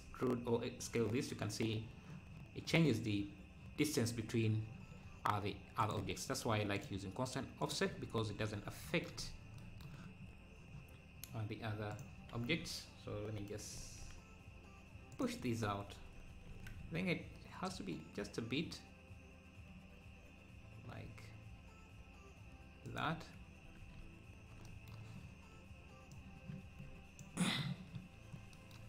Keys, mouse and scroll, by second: 7.6 click, 9.2-9.6 scroll up 1, 11.9 click, 13.7 Left, 13.7 alt+s, 15.4 Tab, 16.0 Tab, 16.5 alt+s, 23.7 Tab, 28.1 scroll down 1.